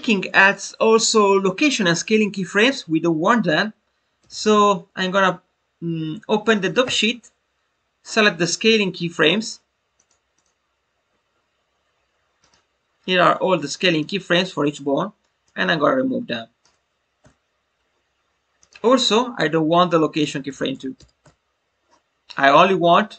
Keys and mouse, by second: 9.9 click, 10.3 click, 12.3 click, 13.8 click, 15.4-16.5 drag, 18.5-21.9 drag, 22.8-23.1 drag.